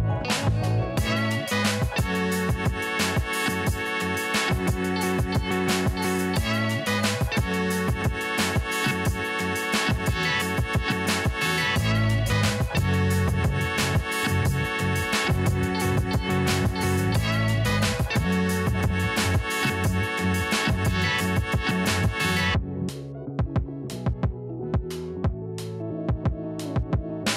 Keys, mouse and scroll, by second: 0.1 click, 0.3-0.9 scroll down 2, 1.0-1.5 alt+scroll up 2, 1.5 right click, 1.7-5.6 drag, 5.6-12.0 drag, 12.0 ctrl+t, 12.7 click, 13.2-14.8 drag, 14.8 alt+scroll up 1, 14.9-16.7 alt+drag, 16.7 ctrl+t, 17.4-20.7 drag, 21.4 alt+scroll up 1, 22.3-23.6 drag, 23.8 alt+scroll down 1, 24.4 alt+scroll up 1, 24.8 ctrl+d, 25.5 ctrl+s.